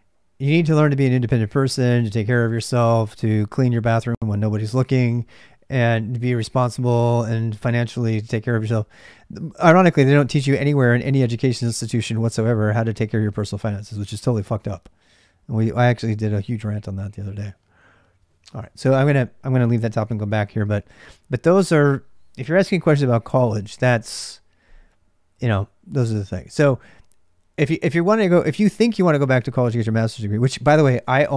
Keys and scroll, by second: 0.0-31.3 typing, 20.1 ctrl+alt+c, 20.1 ctrl+alt+m.